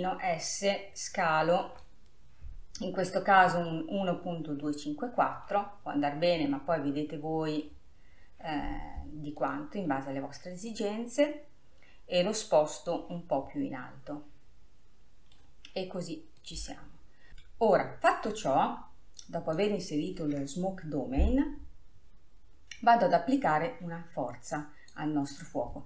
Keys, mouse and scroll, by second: 0.1 s, 1.7 s, 5.9-6.6 scroll down 2, 6.6-9.5 middle drag, 9.5-11.0 drag, 13.4-16.5 middle drag, 16.5 click, 19.3-22.4 drag, 24.7-25.8 drag.